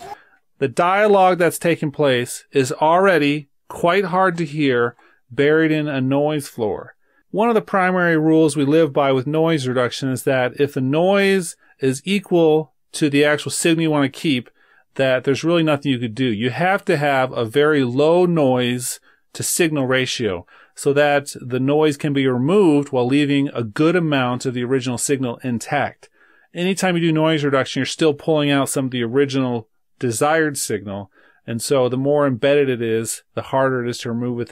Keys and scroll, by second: 3.2 super+-.